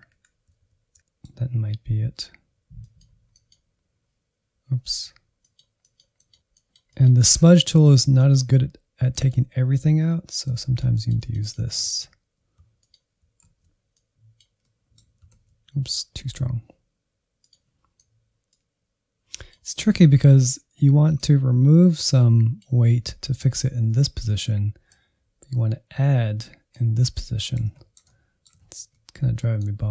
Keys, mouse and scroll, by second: 0.7-11.7 drag, 11.7 alt+z, 12.1-12.5 scroll down 1, 12.7 alt+z, 12.9 click, 13.2 middle click, 13.7 ctrl+z, 13.8 middle click, 14.5-15.8 drag, 15.8 scroll down 2, 15.9-16.9 middle drag, 16.9 click, 17.7 middle click, 17.9 scroll up 3, 18.1 shift+middle click, 18.5-23.8 drag, 23.8-24.9 shift+middle drag, 24.9-26.9 drag, 26.9-28.6 middle drag, 28.6 alt+z, 28.9-29.9 middle drag.